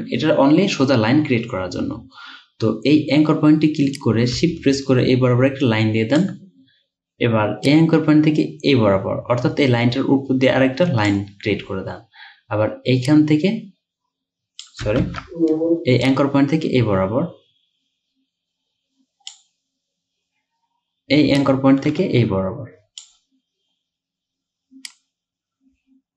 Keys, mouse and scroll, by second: 15.1 ctrl+z, 22.0 ctrl+z.